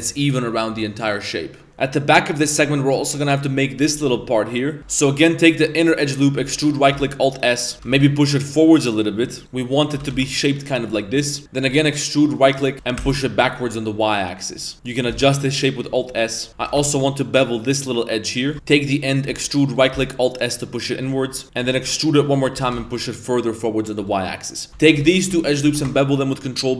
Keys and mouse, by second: 4.8 middle click, 5.1 middle click, 6.4 e, 6.9 alt+s, 7.9 g, 9.6 middle click, 11.3 shift+middle click, 11.4 ctrl+z, 11.7 e, 12.7 g, 14.7 alt+s, 14.7 middle click, 16.1 alt+shift+s, 16.1 shift+middle drag, 16.3 middle click, 16.5 ctrl+b, 16.5 g, 16.6 ctrl+b, 18.5 Tab, 18.5 1, 18.7 middle click, 19.3 e, 20.0 alt+s, 21.3 middle click, 21.4 g, 21.7 e, 22.6 g, 24.8 alt+right click, 25.2 alt+shift+right click, 25.7 ctrl+b.